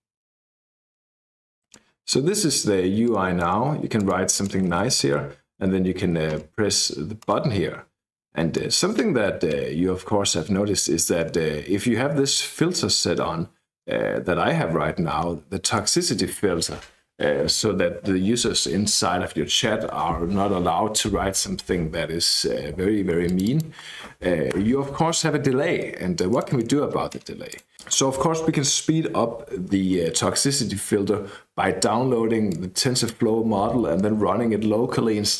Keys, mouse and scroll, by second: 3.0 click, 3.9 click, 4.3-5.3 typing, 7.1 click, 23.2 click, 24.5 BackSpace, 26.3 click, 27.4 click, 32.4 click.